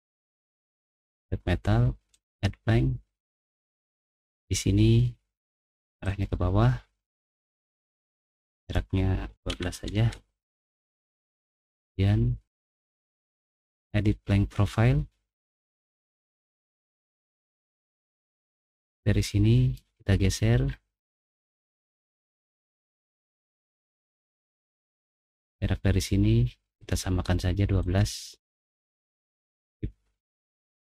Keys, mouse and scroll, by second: 1.0 click, 2.1 click, 6.0 click, 8.1 click, 8.7 click, 9.1-10.0 typing, 13.3 click, 16.2 middle click, 16.6 middle click, 17.1 middle click, 17.5 middle click, 18.5-19.7 drag, 20.6 middle click, 21.2 middle click, 22.7 click, 23.8 middle click, 23.8-24.5 scroll up 2, 24.2 middle click, 25.3 click, 27.8 click, 28.5 click, 29.6 Escape, 30.6 Escape.